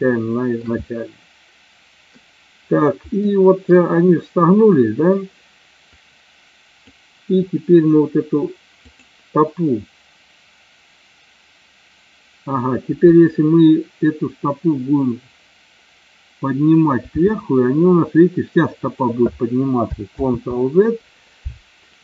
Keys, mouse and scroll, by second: 0.2-0.8 shift+middle drag, 0.9-2.3 middle drag, 3.5 middle click, 6.1 click, 8.9-9.4 drag, 17.4 g, 20.4 ctrl+z.